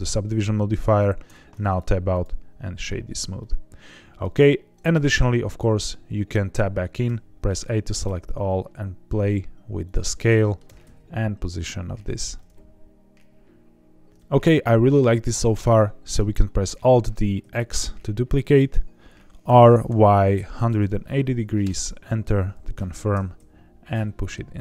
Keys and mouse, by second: 1.2 Tab, 1.6 right click, 3.3 middle click, 4.9 Tab, 7.0 a, 8.0 s, 9.8 click, 10.0 middle click, 10.6 g, 10.8 x, 12.0 click, 12.3-14.1 middle drag, 14.1 Tab, 14.1 middle click, 15.5 middle click, 16.7 alt+d, 17.3 x, 18.4 click, 19.4-20.7 typing, 21.6 KP_Enter, 23.1 g, 23.3 x.